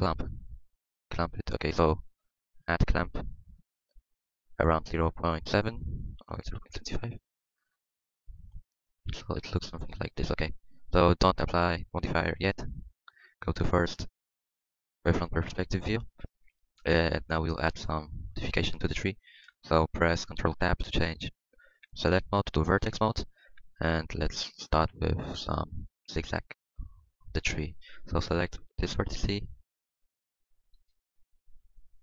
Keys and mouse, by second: 0.8 Tab, 1.9 z, 2.3 z, 7.9 z, 8.2 z, 8.6-11.1 drag, 12.3 KP_1, 15.4 Tab, 20.5 ctrl+Tab.